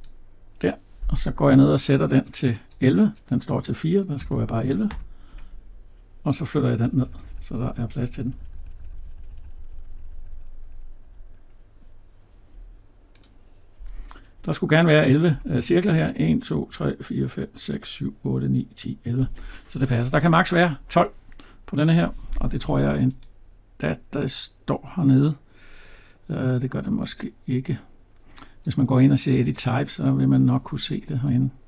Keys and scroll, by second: 4.7 Return, 22.6 Tab.